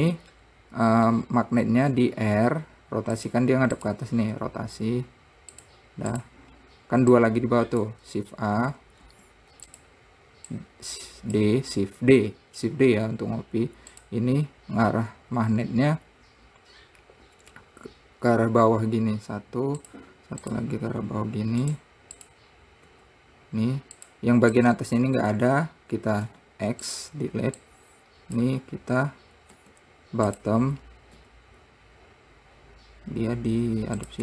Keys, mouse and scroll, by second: 0.3 click, 1.1-1.8 scroll up 1, 2.3 r, 4.2 click, 4.7 r, 6.5 click, 6.9 scroll down 1, 7.6 click, 8.9 shift+d, 10.9 click, 14.3 click, 18.8 r, 20.9 click, 21.3 r, 22.6 click, 23.3 r, 25.0 click, 26.6 x, 28.0 click, 31.6 r.